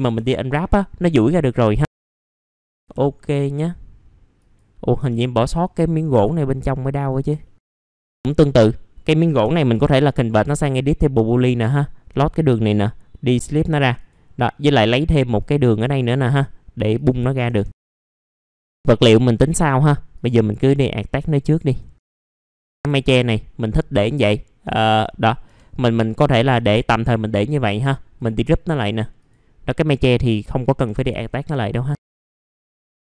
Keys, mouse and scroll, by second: 0.6 alt+middle click, 1.2 right click, 2.4 click, 2.5 alt+middle click, 2.7 scroll up 1, 2.8 F4, 3.5-4.4 scroll up 1, 4.4 click, 4.9 F4, 5.8 scroll down 1, 6.0 right click, 6.9 click, 7.4 alt+middle click, 7.8 scroll up 1, 8.2 alt+middle click, 10.5 ctrl+shift+g, 11.3 click, 11.8 alt+middle click, 12.2 scroll up 1, 12.5 right click, 13.3 click, 15.9 right click, 16.9 click, 17.7 scroll down 1, 17.8 right click, 18.1 click, 18.2 middle click, 18.4 click, 18.6 scroll up 1, 18.7 right click, 19.5 click, 21.0 scroll down 1, 21.3 alt+middle click, 21.9 right click, 22.1 alt+middle click, 22.5 click, 22.8 alt+middle click, 24.6-25.4 scroll up 1, 25.4 F4, 26.2 alt+middle click, 28.1 click, 30.6 middle click, 30.8-31.1 scroll down 1, 32.0 scroll up 1, 32.1 alt+middle click, 32.7-33.1 scroll up 1.